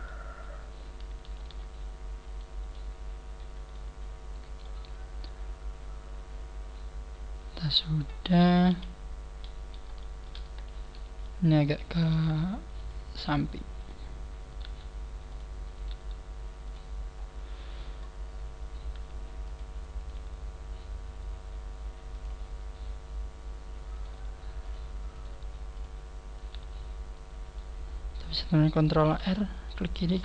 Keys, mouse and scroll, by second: 1.4 ctrl+r, 2.7 middle click, 4.2 scroll down 2, 4.6 middle click, 8.7 KP_1, 9.3-9.9 scroll up 2, 10.0 shift+middle click, 10.5 scroll up 1, 10.8 right click, 12.1 g, 13.2 click, 13.2 right click, 13.4 g, 14.5 right click, 14.6 g, 15.4 click, 15.8 right click, 15.9 g, 16.6 click, 17.3 scroll down 9, 18.2-18.6 scroll up 3, 18.9 g, 20.0 click, 20.0 right click, 20.2 g, 22.2 click, 24.0 right click, 24.1 g, 25.2 click, 25.2 right click, 25.3 g, 26.4 right click, 26.4 g, 27.9 scroll up 2, 28.6 scroll up 1, 29.1 ctrl+r.